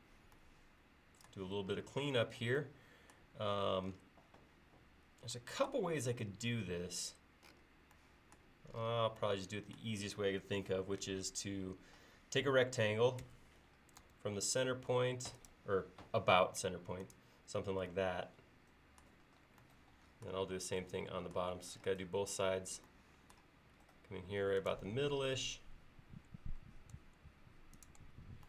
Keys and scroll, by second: 13.3 r.